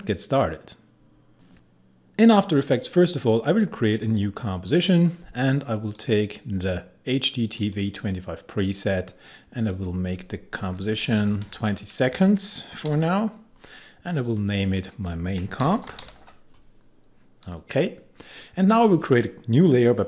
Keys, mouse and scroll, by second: 1.2 click, 4.0 click, 10.9 Left, 12.1 BackSpace, 12.7 Right, 14.2 click, 15.6 shift+m, 17.4 click.